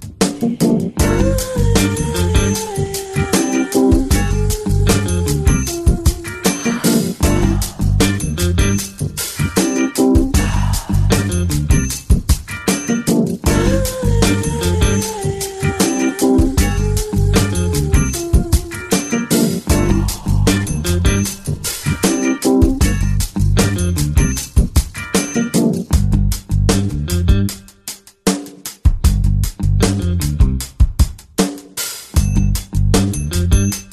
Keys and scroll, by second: 2.1 [, 2.6 [, 3.5 ], 12.8 ], 13.0 ], 13.3 ], 17.7 ], 18.1 ].